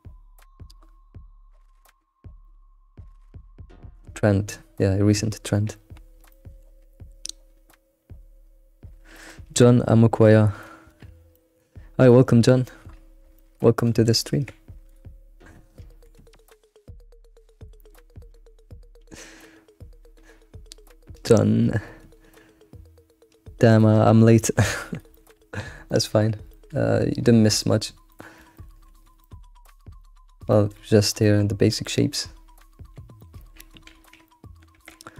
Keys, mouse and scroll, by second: 6.3-9.3 shift+middle drag, 11.3-13.8 shift+middle drag, 13.8 click, 14.4 g, 15.9 g, 24.4 shift+middle click, 24.8-25.1 scroll down 1, 25.1 shift+middle click, 25.5-25.9 scroll up 1, 25.9-27.2 shift+middle drag, 27.2 scroll down 2, 28.1 middle click, 28.9 alt+x, 29.2 middle click, 29.6-30.0 scroll up 3, 30.0 middle click, 30.3 scroll down 3, 30.5-32.4 shift+middle drag, 32.4-33.0 scroll up 2, 33.2 shift+middle click, 34.2-34.7 middle drag, 34.7 Tab.